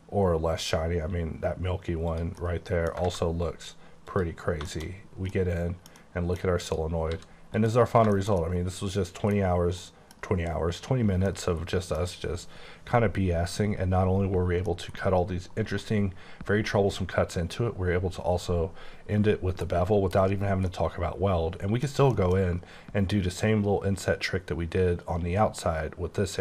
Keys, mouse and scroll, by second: 0.5-0.9 scroll up 2, 2.1 click, 2.7 middle click, 3.1 alt+a, 4.1 click, 4.6 shift+click, 4.7 shift+middle click, 4.9 shift+scroll up 2, 5.4 middle click, 6.0 double middle click, 6.7 click, 7.2 s, 7.6 click, 7.9 scroll down 2, 8.2 shift+middle click, 9.5 scroll up 2, 9.9 middle click, 11.2 middle click, 14.8 middle click, 19.7 KP_1, 20.2 KP_1, 20.7 middle click, 22.2 middle click.